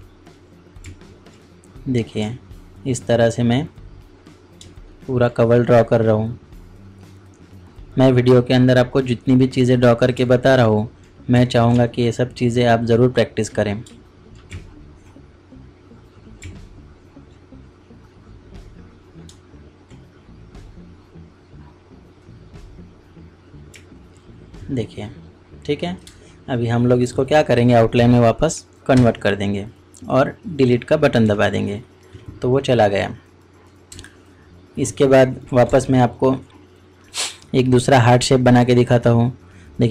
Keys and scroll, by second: 11.7 ctrl+alt+z, 13.8 ctrl+alt+z.